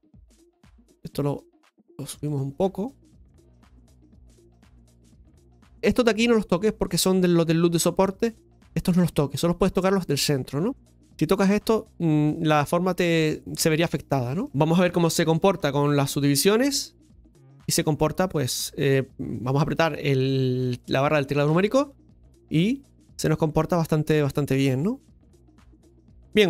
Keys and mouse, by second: 0.5 g, 1.2-2.2 right drag, 2.2 g, 2.8 right click, 4.1 right click, 14.4-16.2 shift+middle drag, 16.9 Tab, 21.4 KP_Divide, 22.8 right click, 24.2-26.2 middle drag.